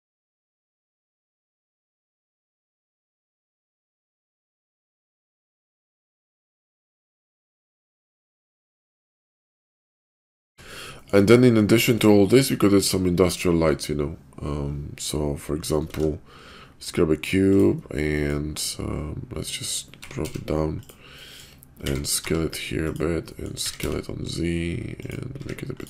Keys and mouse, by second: 0.0-2.5 typing, 3.3 shift+click, 3.6 click, 3.8 shift+click, 4.0 g, 5.5 click, 5.5 s, 6.0 r, 6.6 g, 7.6 middle click, 7.7 Tab, 7.9 middle click, 8.5-10.1 middle drag, 10.4 middle click, 15.8 shift+a, 18.2 click, 19.9 g, 21.1-21.4 drag, 21.7 s, 23.3 click, 23.6 s, 25.4-25.8 typing.